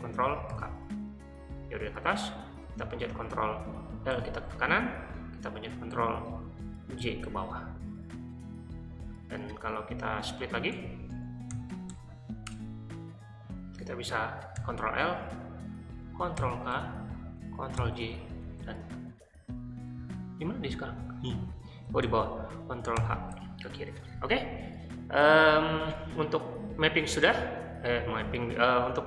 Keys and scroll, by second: 0.4 ctrl+k, 4.1 ctrl+l, 7.0 ctrl+j, 10.4-12.2 typing, 12.5 Return, 14.6 ctrl+l, 16.4 ctrl+k, 17.8 ctrl+j, 19.7-22.3 typing, 22.9 ctrl+h.